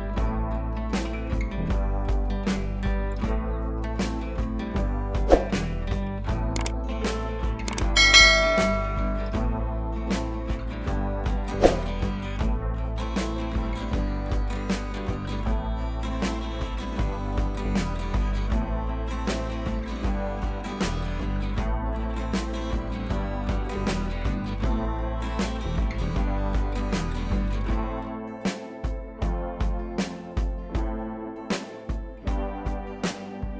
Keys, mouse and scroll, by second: 0.0 ctrl+click, 0.1 ctrl+t, 1.3 click, 1.7 click, 3.0 scroll up 2, 3.3 space, 3.4 click, 3.6 space, 3.7 scroll up 1, 4.5-6.4 drag, 6.6 scroll down 1, 7.2 ctrl+t, 7.9-11.9 alt+drag, 11.9-12.6 scroll down 1, 14.1-18.2 drag, 18.2 ctrl+t, 18.7-24.7 alt+drag, 25.0 click, 27.0 Left, 27.3 scroll up 1, 29.4 click, 30.4 shift+click, 31.2 ctrl+t, 31.9 alt+click, 32.7 BackSpace.